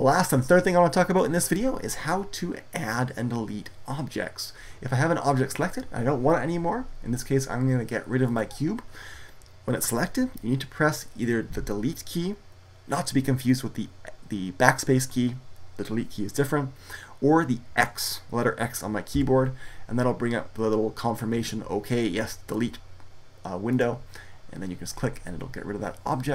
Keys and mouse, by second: 5.4-12.8 right drag, 18.9 x.